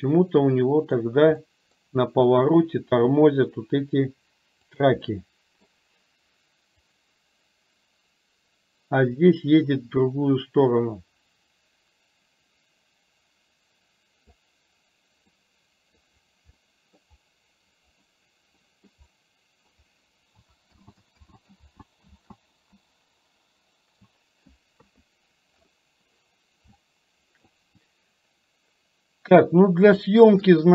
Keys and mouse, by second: 0.1 middle click, 1.4 middle click, 3.1 r, 5.1 middle click, 7.1-14.6 drag, 15.4-16.0 middle drag, 16.7 middle click, 18.7 middle click, 19.2-19.7 middle drag, 20.8 ctrl+z, 21.4 ctrl+z, 21.8 ctrl+z, 24.8 KP_3, 26.8-27.7 shift+middle drag, 30.0-30.6 shift+middle drag.